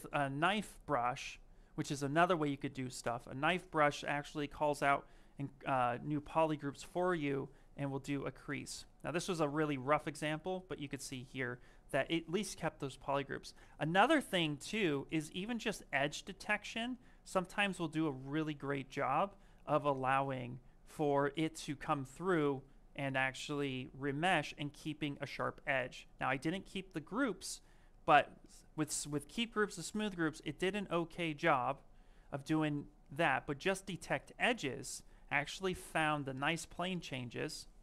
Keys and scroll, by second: 12.8 ctrl+z, 33.5 ctrl+shift+z.